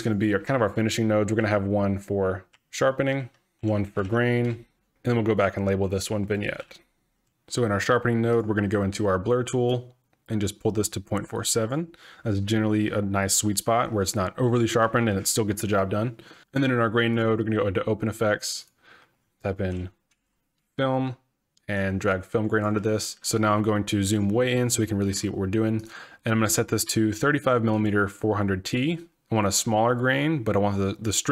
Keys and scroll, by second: 1.1-7.3 typing, 19.7-20.7 typing.